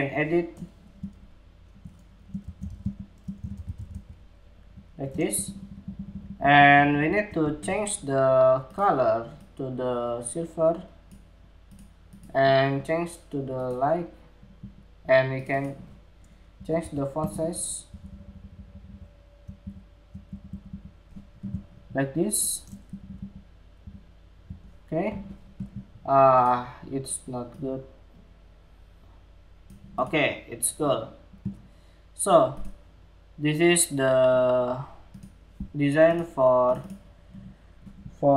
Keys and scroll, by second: 4.0 Escape, 22.4 alt+Right, 22.6 alt+Right, 22.7 alt+Right, 23.4 alt+Left, 24.3 alt+Left.